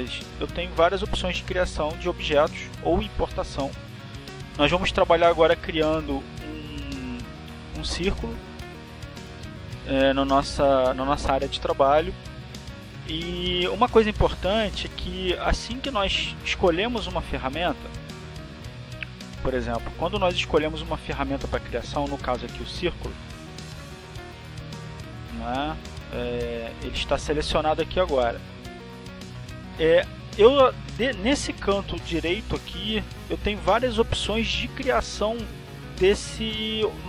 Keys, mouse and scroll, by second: 0.2 click, 2.6-5.4 drag, 9.1 click, 9.8 click, 19.4 click, 20.6 click, 22.2 click, 28.1 click, 29.2-30.6 drag, 32.1 click, 35.6-37.0 drag.